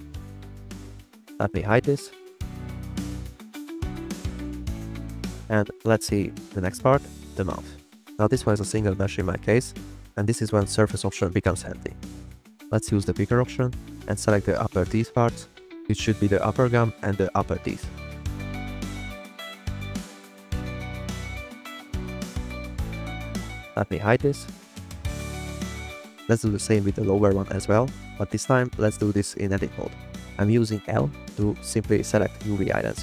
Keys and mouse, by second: 0.6 click, 1.0 drag, 1.6 click, 2.0 click, 3.4 click, 3.7 click, 4.2 click, 4.6 click, 5.2 shift+drag, 5.5 drag, 9.2 shift+middle click, 9.7 drag, 10.1 drag, 11.9 click, 13.1 click, 18.2 click, 18.4 click, 18.8 click, 18.9 click, 20.1 click, 21.9 Return, 23.6 drag, 25.1 click, 25.6 click, 26.2 click, 26.6 Tab, 27.1 middle click, 27.3 click, 28.5-30.8 typing, 31.8 click, 32.4 click.